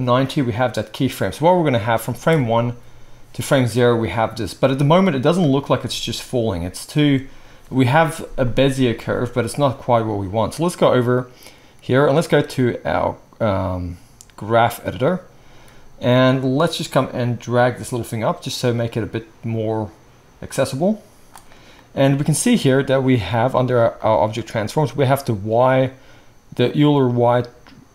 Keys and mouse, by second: 2.3 space, 5.8 space, 7.0 space, 8.9 space, 24.0-24.9 middle drag, 24.9 click, 25.1-27.9 middle drag.